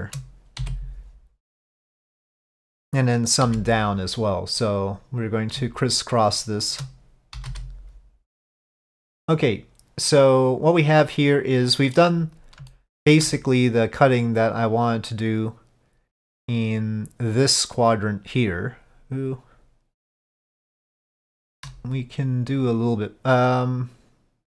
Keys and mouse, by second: 4.7 click, 6.4 shift+click, 10.2-12.1 middle drag, 12.8 shift+middle click, 20.7 shift+middle click, 22.7 click.